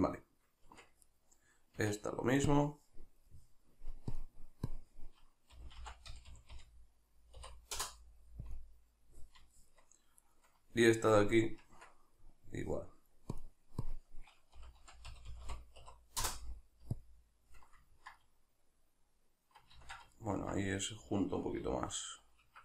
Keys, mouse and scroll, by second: 0.7 Tab, 1.0 right click, 1.8 Tab, 3.4 middle click, 4.1-9.6 drag, 6.3 0, 9.6 shift+middle click, 10.2 right click, 11.6 Tab, 12.6 middle click, 13.3-17.9 drag, 15.3 0, 17.9-22.6 ctrl+middle drag, 19.7 ctrl+z, 21.6 q.